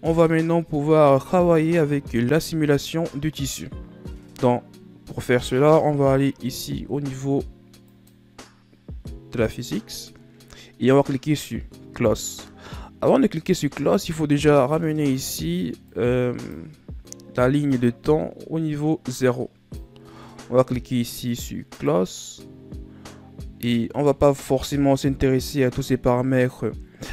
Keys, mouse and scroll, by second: 8.5 click, 16.5-21.1 drag, 22.4 click, 26.8-27.1 scroll down 2.